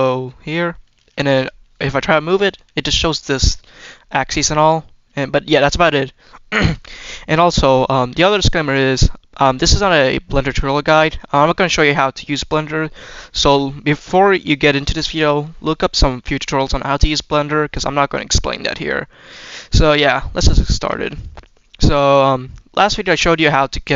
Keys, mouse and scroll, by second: 1.5-2.1 scroll down 1, 2.1 g, 3.1-3.6 shift+middle drag, 5.5 click, 6.1-6.5 shift+middle drag, 6.8-8.7 scroll up 2, 9.6-10.6 middle drag, 11.0-11.7 middle drag, 16.7-17.6 middle drag, 17.9-18.3 scroll up 2, 18.3-19.7 scroll down 1, 21.4 middle drag, 22.2 middle click, 23.3-23.7 middle drag.